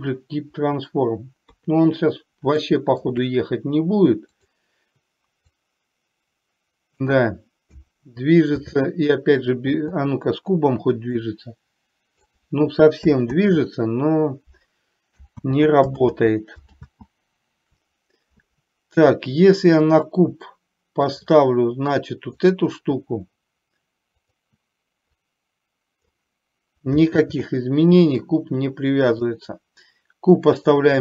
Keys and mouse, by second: 0.0 ctrl+p, 1.6 KP_3, 2.7 middle click, 4.5 click, 5.6-7.1 drag, 8.7 ctrl+z, 11.2-12.3 drag, 13.5 ctrl+z, 16.2 ctrl+z, 17.0 ctrl+z, 24.3 click, 25.5 click, 27.3 ctrl+z, 29.1 click, 30.7 click.